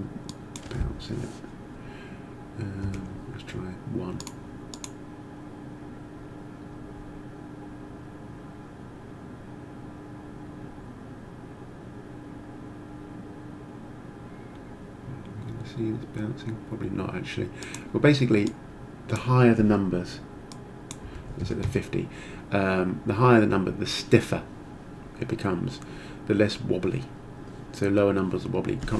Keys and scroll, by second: 2.9 1, 21.1 5, 21.5 0, 21.7 Return.